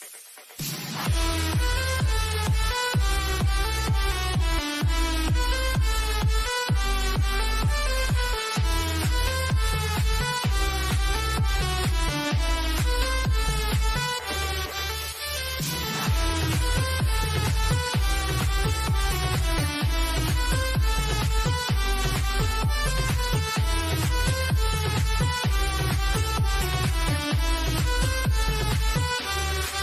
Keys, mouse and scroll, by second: 0.0 click, 3.0-3.3 scroll down 1, 3.7-5.3 shift+middle drag, 5.3 scroll up 1, 5.8-8.7 shift+middle drag, 8.7 click, 10.0 scroll down 1, 10.2 middle click, 11.2-13.4 middle drag, 13.4 click, 13.9-14.7 scroll down 1, 14.7 click, 15.8 scroll down 1, 16.3-19.6 drag, 21.1-23.0 shift+middle drag, 23.0 click, 25.7 scroll down 1, 26.2-29.0 middle drag, 29.0-29.4 scroll up 1.